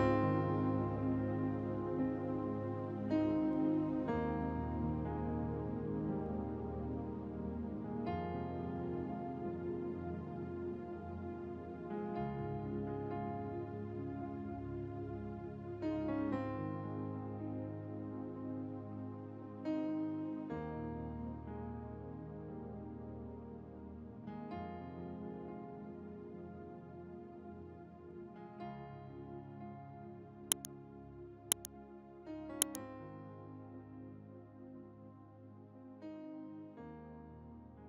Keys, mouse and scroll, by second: 0.0-1.7 typing, 1.5-1.9 scroll up 1, 1.9 click, 3.2-3.6 scroll down 1, 3.6 click, 4.7 scroll down 1, 5.6 v, 5.8 space, 5.9 click, 6.5 space, 7.3 click, 9.5 Down, 15.8 Down, 17.0-18.8 drag, 19.5 ctrl+alt+shift+e, 20.1 right click, 20.9 click, 23.1 click, 24.7 click, 26.4 4, 26.8 click, 29.2 2, 29.9 click, 30.5 ctrl+scroll down 1, 31.1-35.2 scroll down 1.